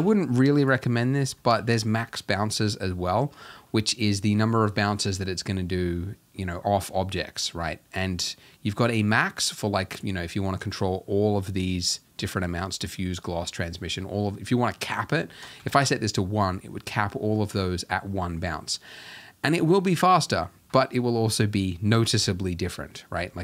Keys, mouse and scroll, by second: 0.0 Escape, 1.1-1.4 scroll up 1, 1.4-2.1 shift+middle drag, 2.1 z, 2.7 scroll up 2, 3.4 shift+middle click, 3.7 scroll up 1, 15.8 click, 16.6-18.6 drag.